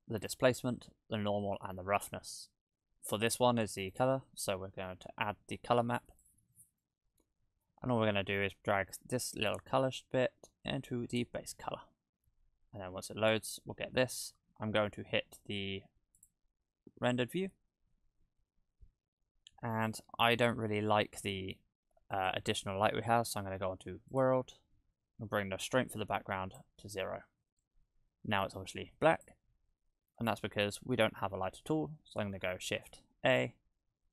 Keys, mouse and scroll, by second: 6.8 middle click, 9.5 click, 12.5 click, 13.0-14.0 scroll up 2, 14.0-14.5 scroll up 1, 16.6 click, 16.6-17.9 scroll up 3, 18.8-19.9 scroll down 11, 19.9-20.5 scroll down 4, 20.5 scroll down 1, 20.6-21.2 scroll down 1, 22.1 click, 25.9 click, 29.1 click, 29.5-32.2 scroll down 16, 30.1 middle click, 31.0 middle click, 32.9 shift+a.